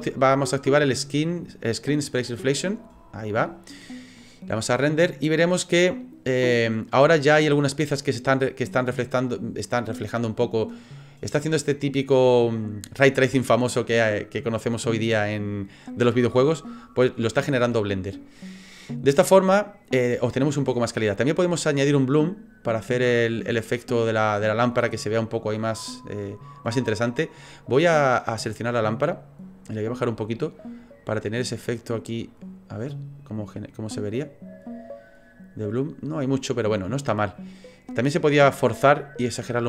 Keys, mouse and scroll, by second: 2.5 click, 4.8 click, 22.0 click, 25.8 right click, 28.7 right click, 29.9 click, 30.7 right click, 31.5 click, 34.1 click, 38.1 click, 39.0 click.